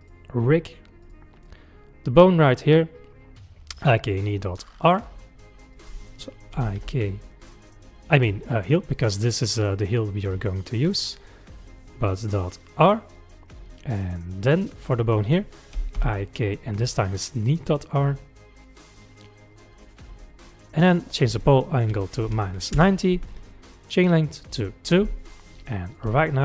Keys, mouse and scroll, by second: 0.0 click, 2.7 click, 4.9 click, 5.7-8.9 drag, 14.9-18.1 drag, 21.0-24.0 drag, 24.3 click, 25.2-25.9 middle drag, 25.9 click, 26.1 g.